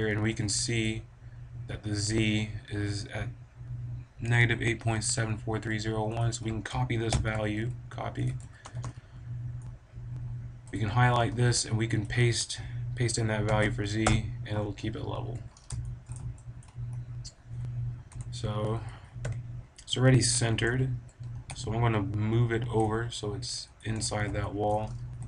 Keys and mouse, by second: 0.3 g, 0.8-2.8 drag, 6.1-7.6 drag, 7.6 middle click, 8.4 a, 8.6 b, 10.7-12.3 drag, 12.3 middle click, 12.7-13.8 right drag, 15.2 a, 15.5 right click, 15.8-17.5 drag, 18.1 l, 19.2 KP_7, 20.6 KP_1, 21.3 g, 23.7-25.2 drag.